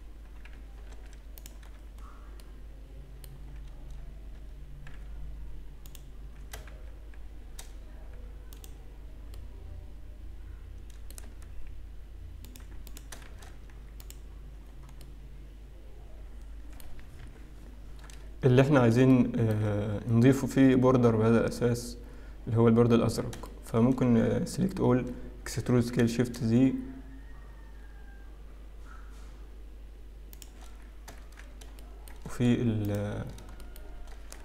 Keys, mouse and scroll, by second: 0.9 alt+m, 2.1-4.1 scroll down 7, 4.1 middle click, 4.1-4.4 scroll up 6, 4.4 Tab, 4.9 z, 7.5 shift+z, 7.7-8.3 scroll down 3, 8.6 click, 9.4 middle click, 11.7 Tab, 11.7-12.1 scroll up 3, 12.5 click, 12.9 click, 13.5 shift+z, 14.4 alt+click, 14.7-15.6 scroll down 2, 15.6 middle click, 15.6-16.7 scroll down 3, 17.4 KP_7, 18.2-19.0 scroll up 1, 19.0-19.6 scroll up 2, 19.6 shift+middle click, 20.4-21.9 scroll up 1, 22.2-23.3 scroll down 2, 23.5 shift+middle click, 24.1-24.7 scroll up 3, 24.7-25.4 scroll down 1, 25.4-26.1 scroll up 1, 26.1 shift+e, 31.3 shift+z, 31.8 shift+middle click, 33.2 click, 33.2-34.1 scroll up 4, 33.7 shift+middle click.